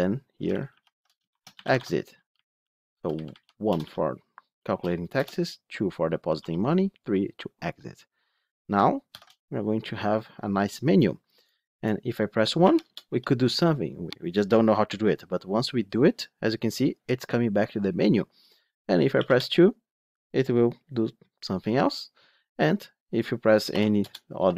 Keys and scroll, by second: 0.3 ctrl+shift+Left, 9.0 ctrl+shift+F10.